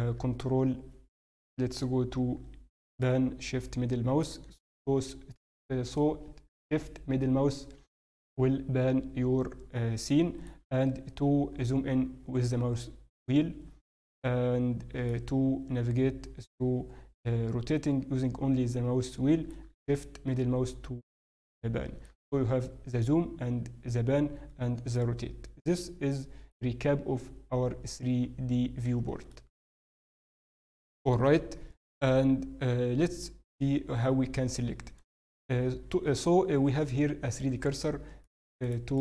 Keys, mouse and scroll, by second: 0.4 ctrl+scroll up 3, 3.0 shift+middle click, 11.1-11.6 scroll down 3, 11.6 scroll up 1, 12.0-12.9 scroll down 3, 12.3-12.9 scroll up 4, 13.3-14.7 scroll down 1, 15.0 middle click, 15.0-16.1 scroll down 4, 19.7 shift+middle click, 24.6-26.3 scroll down 2, 24.9 middle click, 27.9-28.6 scroll down 4, 28.2-28.6 scroll up 1, 29.3 shift+middle click, 31.1 scroll up 3, 31.1 KP_7, 31.7-32.3 scroll up 1, 38.3-39.0 shift+right click.